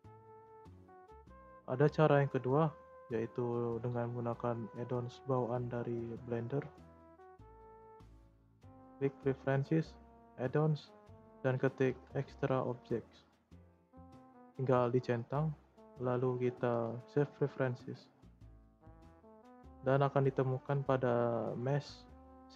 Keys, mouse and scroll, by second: 0.5 Delete, 6.6-9.7 drag, 18.6 shift+a.